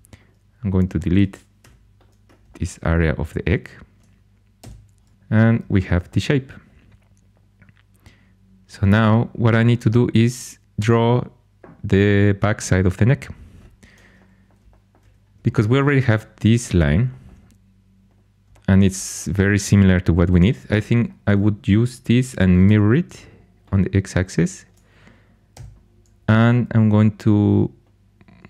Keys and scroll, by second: 1.5 4, 4.5 x, 15.8 2, 22.5 alt+x, 25.5 g.